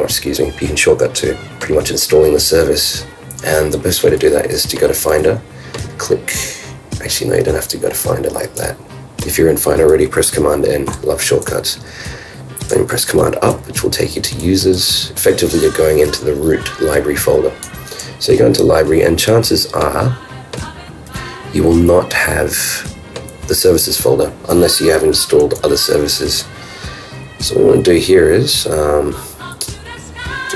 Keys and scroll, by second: 10.9 super+n, 13.0 super+Up, 14.7 super+Up, 16.9 super+Up, 17.6 super+Down.